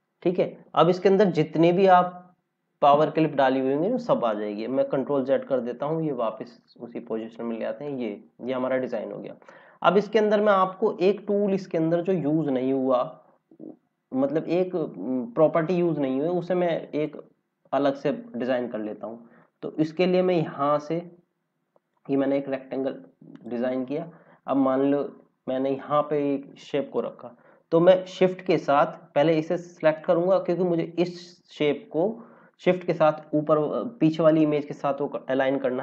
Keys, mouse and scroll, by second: 5.0 ctrl+z, 5.3 ctrl+z, 5.8 ctrl+z, 6.6 ctrl+z, 7.8 click, 8.1 scroll down 1, 9.2 scroll up 1, 16.9 click, 19.3 click, 23.9 scroll up 1, 24.6 click, 29.4 click, 33.1 click.